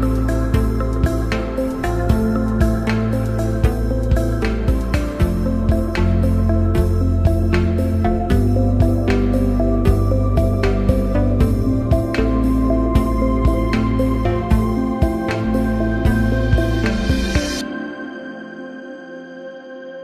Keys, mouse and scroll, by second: 1.9-2.9 alt+drag, 5.8-6.2 alt+drag, 8.2-8.6 alt+click, 9.2 ctrl+-, 9.3-10.4 drag, 11.9 ctrl+=, 14.2-16.1 drag, 19.0 click, 19.4 ctrl+-.